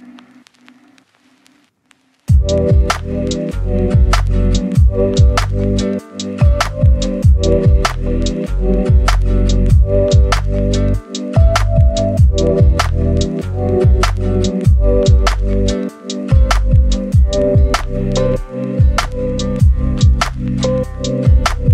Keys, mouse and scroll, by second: 4.8 scroll down 1, 4.9-5.3 scroll up 1, 5.3 click, 7.4 scroll down 1, 7.5 scroll up 1, 7.7 click, 8.6 scroll down 1, 8.9-9.8 scroll up 1, 9.8-15.0 scroll down 1, 15.0 click, 17.3 scroll down 1, 17.4 right click, 17.9 scroll up 1, 19.2 click, 19.6 right click, 19.9 scroll up 1, 20.2 scroll down 1, 20.3 right click, 20.6 scroll up 1.